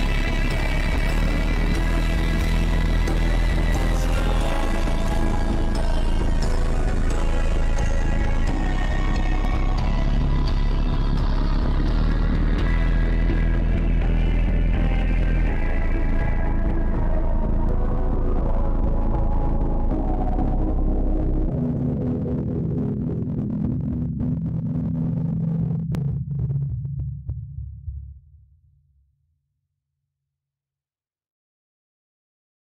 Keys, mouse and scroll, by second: 2.0 click, 2.5-3.4 scroll up 7, 3.4 scroll up 1, 4.2-4.8 scroll down 6, 4.8 click, 5.2-5.8 scroll up 7, 7.5 click, 8.0 click, 8.3 click, 9.2-9.6 drag, 9.7 click, 10.8 scroll down 1, 11.3-11.7 scroll down 2, 11.7 click, 12.1 click, 12.6 click, 13.1 click, 14.5 click, 14.6 click, 15.1 click, 15.8 click, 16.1 scroll down 1, 16.4 scroll up 1, 17.0 scroll up 1, 17.8 click, 18.1 click, 18.5 click, 18.7 click, 19.6 click, 19.9 click, 20.2 click, 20.6 click, 20.7 click, 20.9 click, 22.7 ctrl+z, 23.1 click, 23.5 ctrl+z, 23.6-24.1 ctrl+z, 24.6 ctrl+shift+z, 24.8 click, 26.1 click, 26.4 click, 28.5 ctrl+z, 29.5 click, 29.9 click, 31.2 ctrl+z, 31.6 click, 32.1 click.